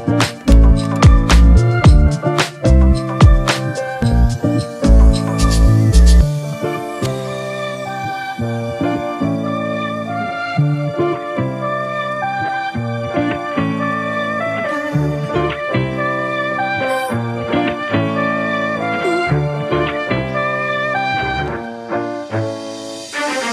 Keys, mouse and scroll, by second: 2.0 alt+shift+click, 7.2 Return, 8.3 Left, 8.4 Left, 8.6 Left, 8.7 Left, 9.2 Left, 9.8 Left, 9.9 Left, 14.9 scroll up 1, 20.1 alt+click.